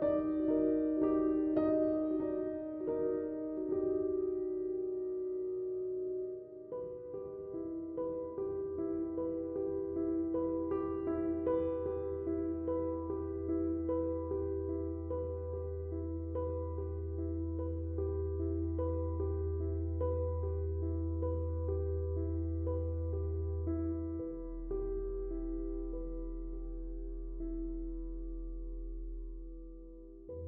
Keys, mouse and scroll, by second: 8.1-21.8 shift+drag, 21.8-25.4 shift+drag, 25.4-30.4 drag.